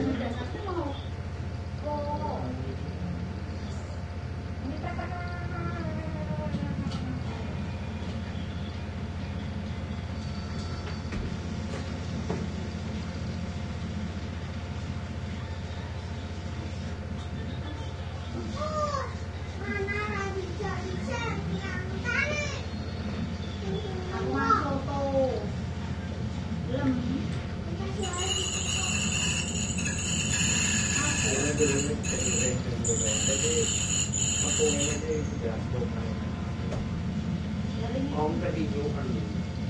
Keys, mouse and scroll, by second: 2.0 click, 3.4 click, 5.6 click, 7.2 click, 9.4 click, 10.6 5, 11.2 Return, 12.0 click, 13.4-14.8 drag, 15.6 click, 17.2-20.2 drag, 20.4 click, 26.0-27.4 drag, 27.4 ctrl+z, 28.2 click, 29.5-31.3 drag, 33.4 click, 35.2 7, 36.8 Return, 38.0-39.6 drag.